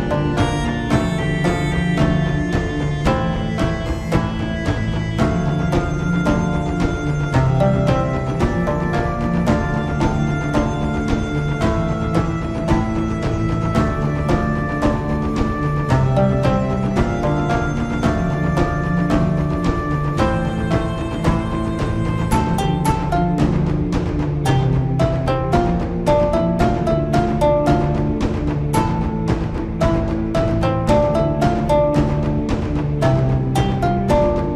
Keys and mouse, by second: 4.7-8.4 shift+drag, 8.5 middle click, 10.3-12.1 shift+drag, 12.8-14.2 middle drag, 14.5 middle click, 26.4 alt+h, 29.1 Tab, 29.6 middle drag, 30.9-31.8 shift+middle drag, 31.9 middle click.